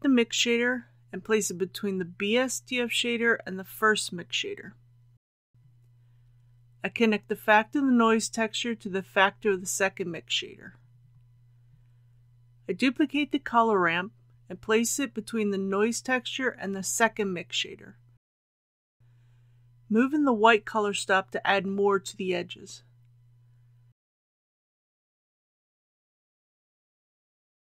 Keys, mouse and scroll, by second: 1.3 shift+d, 2.3 click, 12.8 shift+d, 14.1-27.7 drag.